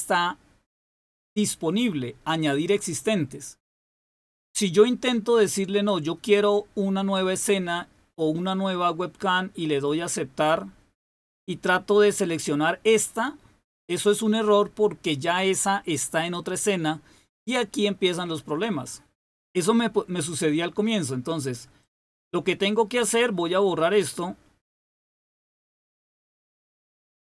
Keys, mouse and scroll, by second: 9.7 click, 21.7 click, 24.9 click, 27.0 click.